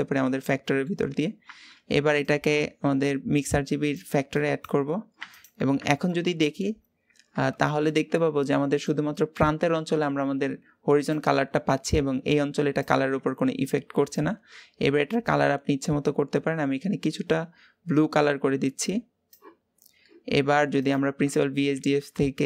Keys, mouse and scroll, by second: 6.3-7.4 scroll up 2, 7.4-14.9 shift+middle drag, 14.9 click, 20.7 ctrl+shift+click.